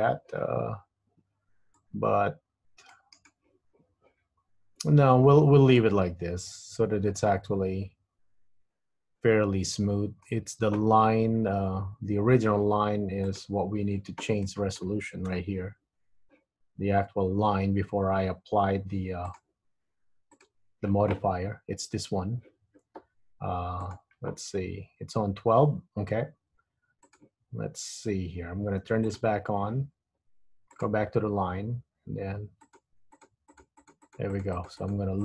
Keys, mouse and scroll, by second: 1.9 click, 5.4-6.0 scroll down 3, 6.0 middle click, 10.6 Tab, 11.3 Tab, 13.4 click, 14.5 middle click, 15.4 KP_1, 19.4 click, 20.4 click, 21.6 Tab, 24.0 click, 27.2 click, 29.2 click, 30.9 click, 32.8 click, 33.2 click, 33.6 click, 34.0 click, 34.2 click, 34.5 click, 34.6 click, 35.0 click.